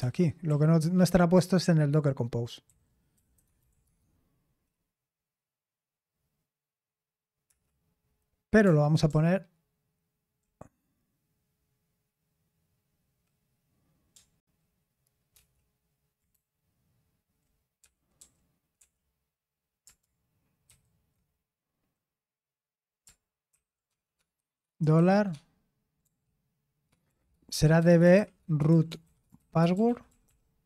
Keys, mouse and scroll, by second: 0.0-1.0 typing, 2.4-4.2 typing, 7.5 Return, 8.4-10.1 typing, 15.3 ctrl+d, 16.3-18.7 typing, 20.6 ctrl+v, 23.2-24.9 typing, 26.0 typing, 27.0-30.6 typing.